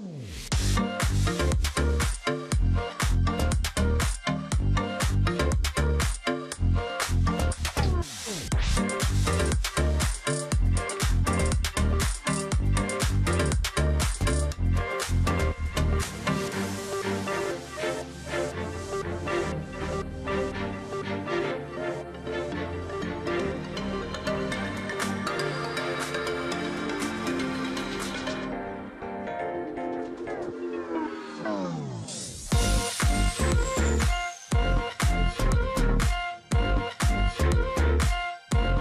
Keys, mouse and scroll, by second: 1.3 ctrl+z, 1.5 space, 3.2 ctrl+g, 3.6-4.1 alt+scroll down 1, 4.6-5.0 alt+scroll down 1, 5.0 ctrl+z, 5.7-6.5 alt+scroll up 1, 7.6 ctrl+g, 8.0 alt+scroll down 1, 8.1 space, 8.9-9.3 scroll up 2, 9.4 space, 14.9-15.5 alt+scroll down 1, 16.7-17.2 alt+scroll up 1, 21.0-21.3 alt+scroll down 1, 23.2-23.7 alt+scroll up 1, 23.8 double click, 25.0 space, 25.4-25.9 alt+scroll up 1, 31.6 ctrl+shift+g, 32.7-33.2 alt+scroll down 1, 35.3 ctrl+g, 35.8-36.3 alt+scroll up 1, 36.5 double click, 37.9 ctrl+f.